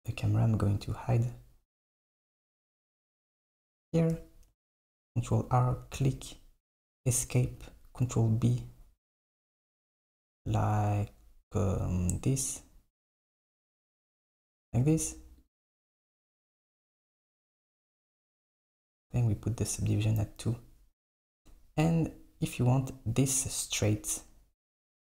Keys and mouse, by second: 0.2 click, 0.8 click, 4.6 ctrl+r, 7.6 ctrl+b, 14.4 click, 14.7 Tab, 15.4 click, 16.7 click, 18.0-21.1 drag, 21.5 Tab.